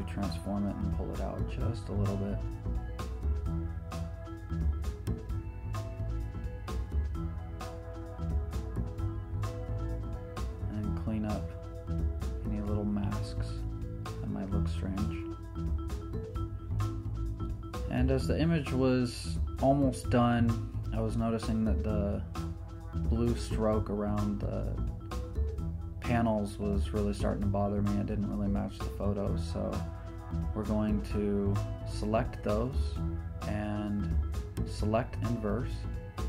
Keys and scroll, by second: 2.0 super+t, 9.1 Return, 10.0 z, 15.9-17.0 typing, 26.6 super+z, 29.9 e.